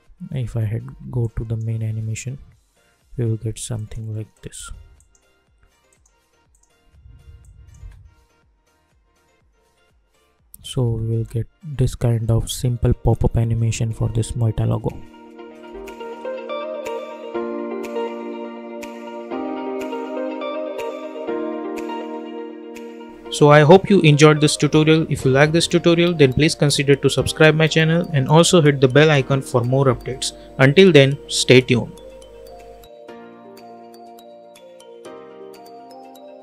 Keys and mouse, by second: 0.4 space, 1.2-3.7 drag, 7.7 space, 10.7 space, 15.6 space.